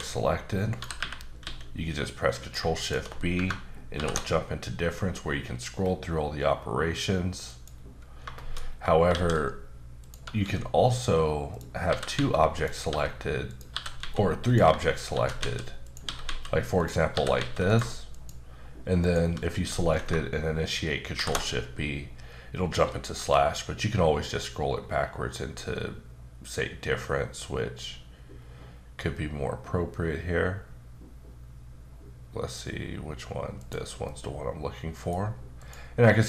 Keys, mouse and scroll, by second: 0.7 click, 1.0-1.4 typing, 2.4 click, 2.8 shift+click, 3.9 ctrl+shift+b, 4.8-5.8 scroll down 5, 5.8-6.5 scroll up 4, 6.5-7.5 scroll down 1, 7.5 click, 8.4 shift+middle click, 8.6 scroll up 1, 9.1 shift+a, 10.0 click, 10.4 s, 11.5 click, 11.9-14.0 typing, 12.5 click, 13.5 click, 14.4 click, 15.1 shift+d, 15.8 click, 16.0 s, 16.8 click, 17.1 typing, 17.7 click, 18.1 shift+click, 18.6 click, 19.0 shift+double click, 21.1 ctrl+shift+b, 22.9-23.8 scroll down 1, 23.8-25.5 scroll down 4, 25.8-26.5 scroll down 3, 26.5-27.1 scroll up 1, 27.1-27.7 scroll up 1, 27.7-29.0 scroll down 3, 29.0-29.7 scroll down 2, 29.8-32.2 scroll up 5, 32.8-33.5 scroll up 2, 33.5 click, 34.1 middle click, 35.6 click, 36.0 middle click.